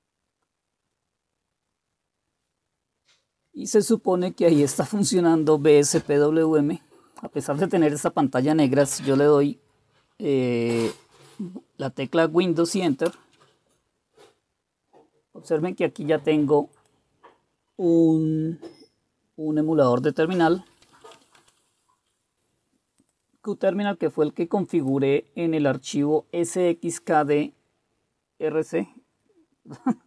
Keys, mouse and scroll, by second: 13.1 super+Return, 20.1-21.4 typing, 22.3-30.0 drag.